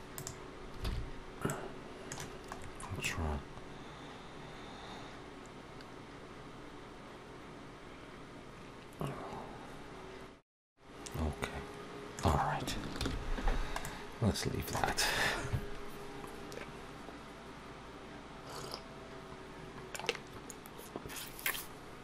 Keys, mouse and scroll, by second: 0.7 alt+a, 1.3 middle click, 2.4-3.3 scroll down 5, 2.8 middle click, 12.9 ctrl+s, 13.3 scroll down 2, 13.7 middle click.